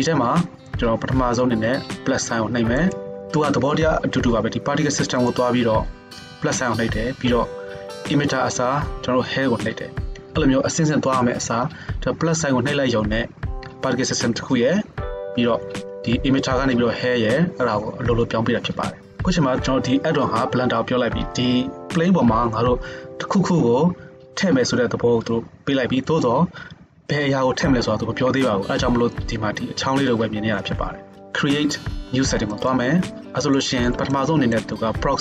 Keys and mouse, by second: 5.4-32.6 middle drag, 32.6-35.2 drag.